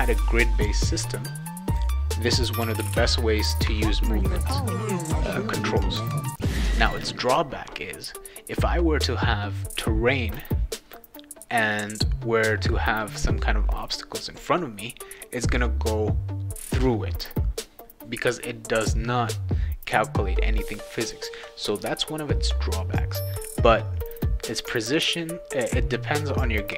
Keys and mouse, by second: 2.6 w, 2.8 w, 2.9 w, 4.8 click.